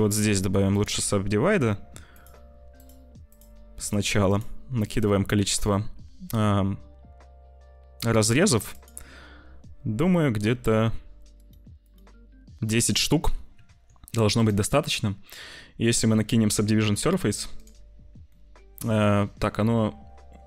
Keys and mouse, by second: 2.0 click, 2.6 click, 3.3 click, 3.7 click, 4.3 click, 4.8 click, 8.7 click, 11.2 click, 11.7 click, 13.5 Tab, 14.4-17.5 drag, 18.2 middle click.